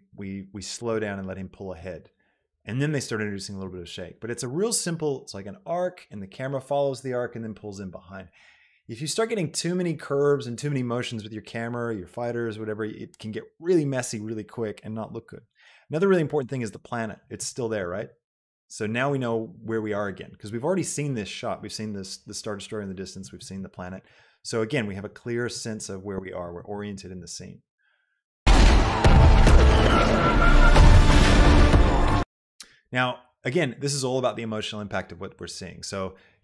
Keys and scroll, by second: 28.7 space, 32.4 space.